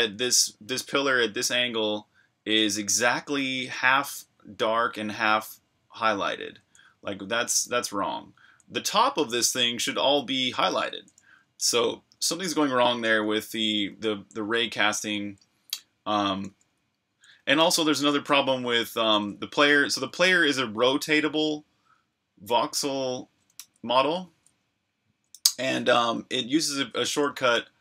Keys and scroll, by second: 0.0 typing, 6.4-9.4 typing, 10.9-13.6 typing, 15.2 typing, 16.5-19.9 typing, 20.9 v, 23.6-24.2 typing, 25.4-27.8 typing.